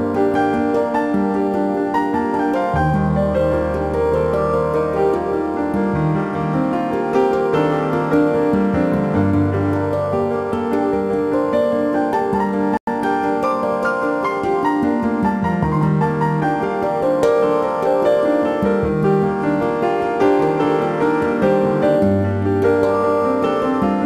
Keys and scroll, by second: 16.5 ctrl+alt+z.